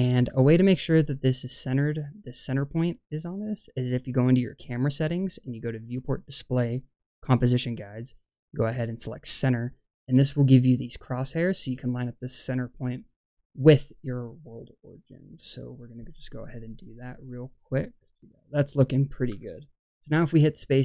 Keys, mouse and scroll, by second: 3.5 click, 5.7 click, 7.1 click, 7.5-8.7 scroll down 3, 8.9 click, 14.9 click, 15.8-17.4 drag, 17.8 click, 18.2 click, 19.3 space.